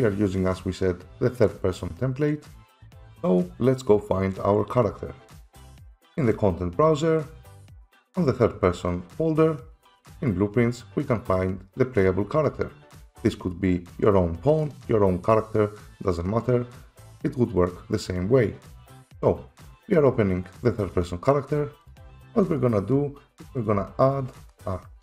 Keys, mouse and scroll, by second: 2.7 F7, 6.2 click, 7.4 click, 10.1 click, 10.3 click, 13.3 click, 20.7 click, 20.9 click, 21.7 click, 21.9 right click, 23.7 click.